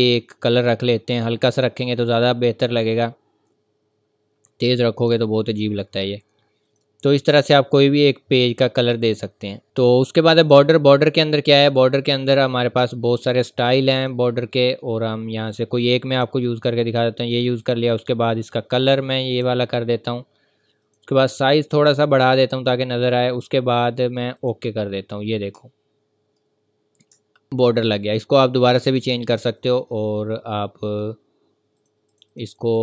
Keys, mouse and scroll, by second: 6.6 click, 7.2 scroll down 1, 8.7-9.3 scroll up 1, 9.6 click, 12.2 scroll down 1, 13.0-14.0 scroll up 1, 14.0 click, 14.4 scroll down 1, 15.4-16.1 scroll up 1, 16.1 click, 24.4 click, 25.2 scroll up 1, 25.6 ctrl+scroll down 1, 26.0 v, 27.2 scroll up 1, 28.9 click, 31.8 click.